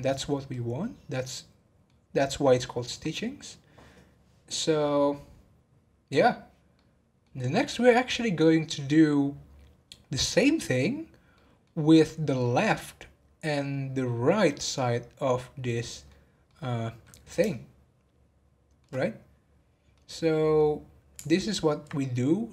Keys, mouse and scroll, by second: 0.5-3.6 middle drag, 6.7-9.9 middle drag, 11.3 middle click, 11.8 scroll up 1, 12.4-19.0 middle drag, 19.0-19.9 scroll up 1, 19.9-21.3 middle drag, 21.3 alt+click.